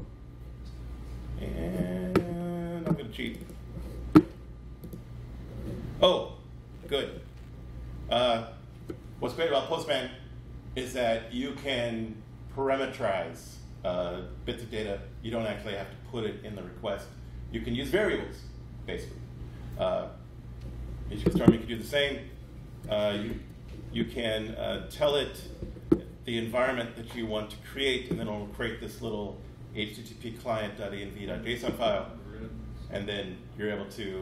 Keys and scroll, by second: 23.3 super+b, 25.3 super+b.